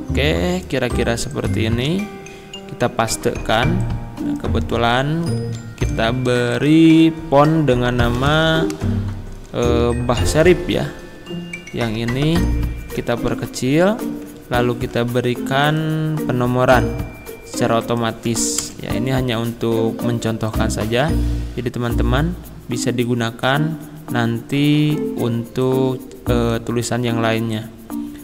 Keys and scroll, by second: 1.9 ctrl+v, 4.9 ctrl+b, 5.4 ctrl+a, 8.0-8.9 typing, 13.4 ctrl+[, 18.6 Return.